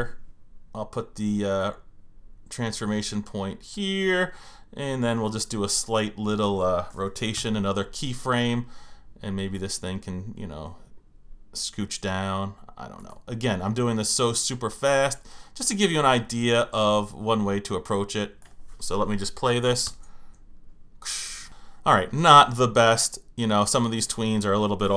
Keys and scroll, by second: 7.3 F6, 19.8 Return.